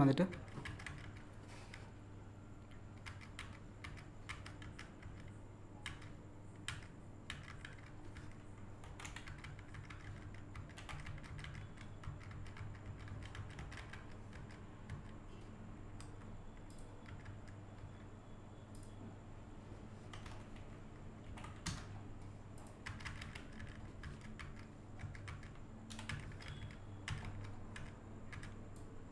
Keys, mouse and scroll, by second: 7.0 scroll up 1, 8.8 Up, 9.0 Left, 10.8 Up, 16.7 click, 18.7 click, 22.6 click, 24.4-27.8 typing, 25.9 Down, 28.8-29.1 drag.